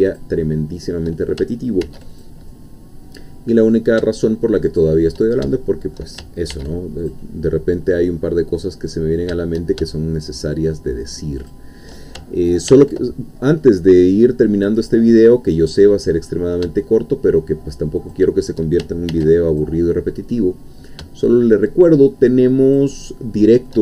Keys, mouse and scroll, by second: 0.1 shift+click, 0.4 shift+middle click, 1.8 ctrl+r, 2.1 ctrl+click, 4.7 shift+click, 5.6 shift+middle click, 6.5 ctrl+r, 7.0 ctrl+click, 11.4 shift+click, 12.7 ctrl+r, 13.9 click, 18.0 shift+click, 19.1 ctrl+r, 19.5 ctrl+click, 22.6 shift+click, 23.0 shift+middle click.